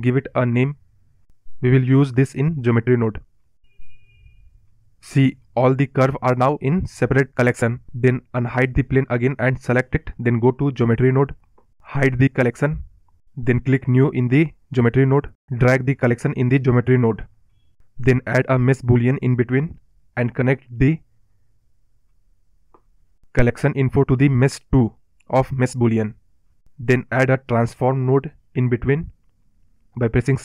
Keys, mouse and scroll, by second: 6.2-6.8 scroll down 4, 6.8 scroll up 3, 7.4 click, 8.1 click, 8.5 click, 9.5-11.0 drag, 11.0-11.4 scroll down 3, 13.5-16.3 drag, 20.6 o, 24.0-25.4 scroll down 3, 25.4 scroll up 1, 25.5-25.9 scroll down 2, 25.9-29.6 middle drag.